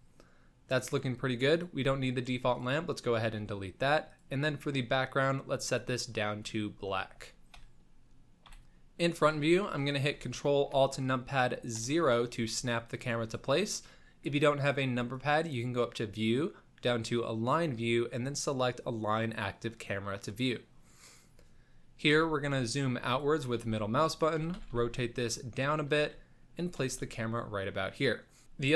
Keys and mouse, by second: 1.5 click, 1.8 x, 4.1 click, 8.4 KP_1, 9.6 shift+middle click, 11.7 ctrl+alt+KP_0, 15.1-20.9 drag, 22.1 g, 23.6 g, 24.4 r, 25.9 g, 26.9 x.